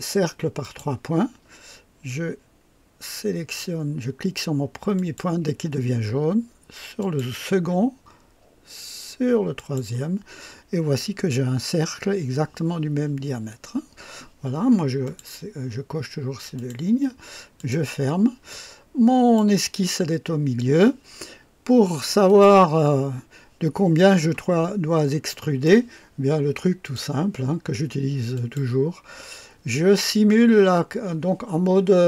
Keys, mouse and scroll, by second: 0.6 click, 4.9 click, 7.0 click, 9.6 click, 10.7-11.0 scroll up 2, 13.8-14.2 scroll down 2, 15.0 click, 16.5 click, 17.6 click, 18.5-19.6 drag, 22.2 click, 23.0-23.3 scroll up 2, 24.7 scroll up 2, 25.3-25.8 right drag, 26.8 click, 28.3 click.